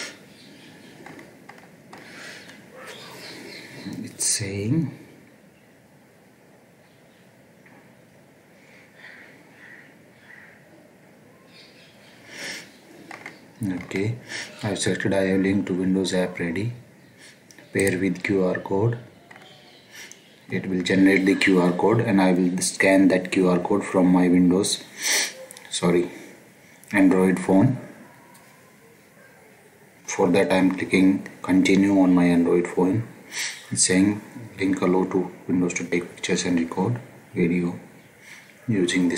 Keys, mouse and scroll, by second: 17.7 click, 19.3-39.1 scroll.